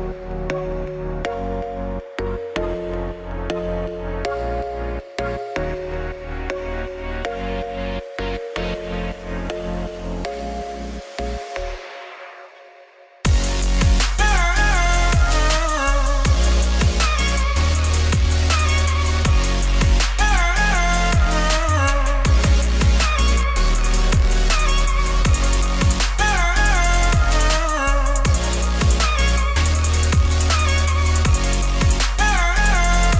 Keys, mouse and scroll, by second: 0.4 click, 0.6 shift+click, 0.7 shift+click, 0.9 g, 2.0 click, 2.2 g, 3.9 click, 4.1 shift+click, 7.4 e, 8.3 click, 8.4 g, 9.5 click, 9.7 g, 10.0 shift+click, 10.2 g, 11.5 click, 12.0 alt+click, 12.3 f, 12.9 Tab, 13.0 click, 13.1 Tab, 13.2 a, 15.1 middle click, 15.6 s, 16.2 middle click, 16.5 KP_3, 17.5 Tab, 17.6 click, 18.6 middle click, 19.5 click, 19.6-21.7 drag, 21.7-22.7 middle drag, 22.7 KP_1, 23.0 Tab, 23.2 1, 23.3 click, 23.5 shift+click, 23.6 ctrl+b, 24.6 click, 24.8 shift+click, 25.0 ctrl+b, 26.1 click, 26.3 shift+click, 26.7 ctrl+x, 26.9 click, 27.0 shift+click, 27.3 ctrl+b, 28.8 click, 29.3 g, 30.4 click, 30.6 g, 31.2 click, 31.3 g, 31.8 click, 31.9 g, 33.0 click.